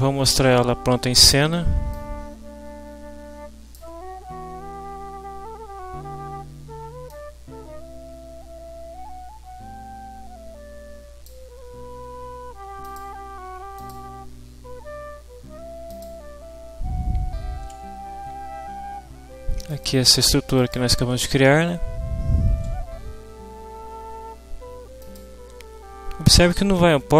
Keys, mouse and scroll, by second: 1.9-3.9 drag, 7.1-11.5 drag, 13.8 click, 15.9 click, 19.7 click, 25.0 click.